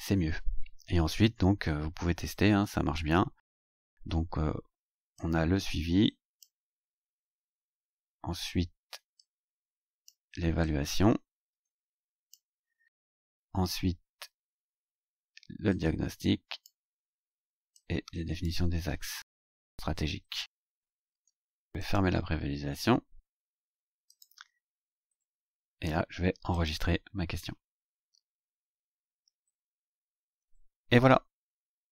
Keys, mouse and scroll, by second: 5.1-6.6 drag, 9.1 click, 10.6-12.5 drag, 15.7 click, 17.7 click, 21.8 click, 24.1 click, 25.6-25.9 scroll up 2, 26.5 click.